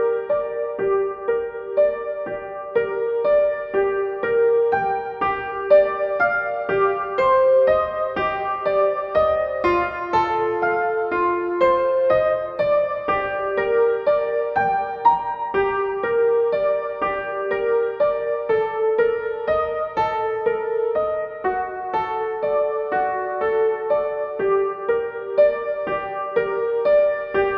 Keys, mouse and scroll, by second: 10.2 click, 14.1-21.3 drag, 21.3-27.5 drag.